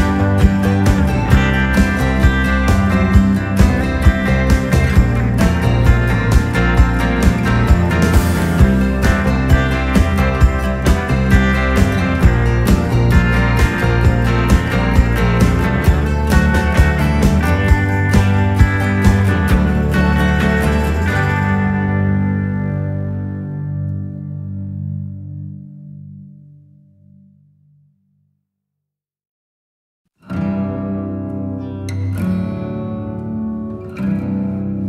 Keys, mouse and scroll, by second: 1.5 click, 3.3 typing, 3.4 click, 4.9 typing, 6.4 shift+Num_Lock, 6.9 shift+click, 7.7 typing, 9.4 click, 9.4 typing, 11.9 click, 11.9 typing, 14.9 click, 17.7 scroll up 1, 19.9-20.4 scroll up 1, 21.0 scroll up 1, 22.2 click, 22.9-23.2 scroll up 1, 24.4 scroll up 1, 26.1-26.6 scroll up 1, 27.0 scroll up 1, 29.6-30.1 scroll up 1, 31.4 click, 33.3 click.